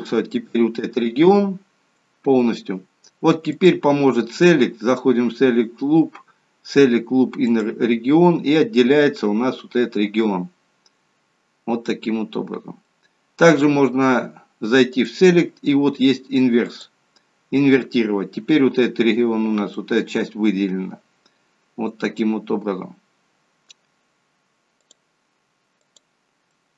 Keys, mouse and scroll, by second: 3.5 click, 8.8 middle click, 15.0 click, 16.9 click, 19.9 middle click, 24.8 click, 26.5 middle click.